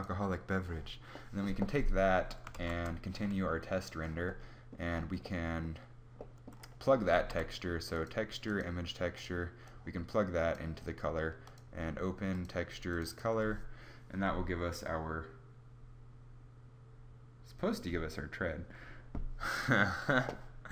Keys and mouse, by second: 2.2 shift+z, 6.8 shift+a.